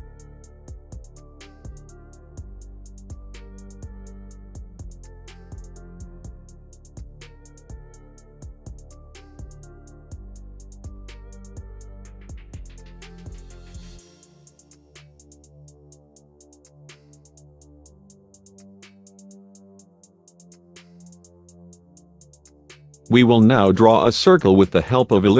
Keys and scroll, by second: 0.3 shift+F2, 3.5 F3.